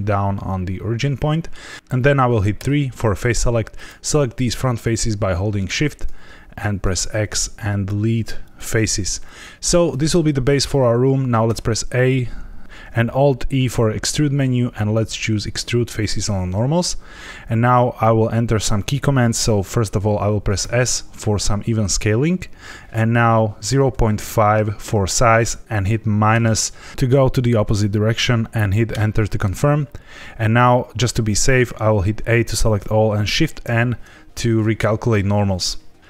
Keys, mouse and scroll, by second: 0.3 middle click, 2.5 3, 3.7 click, 4.8 shift+click, 5.6 shift+click, 6.8 x, 9.3 shift+middle click, 11.4 a, 12.6 alt+e, 13.4 alt+e, 20.6 s, 23.6 KP_0, 23.8 KP_Decimal, 24.1 KP_5, 26.3 KP_Subtract, 28.8 KP_Enter, 32.1 a, 33.6 shift+n.